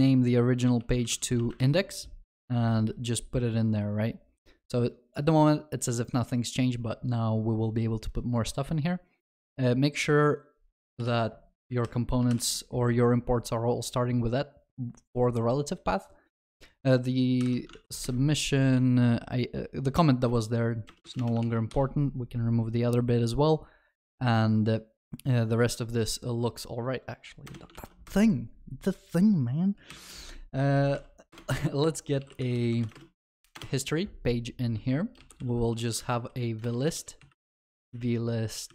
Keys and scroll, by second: 12.3 ctrl+y, 17.5 ctrl+y, 27.8 ctrl+s, 29.9 ctrl+s, 29.9 alt+Insert.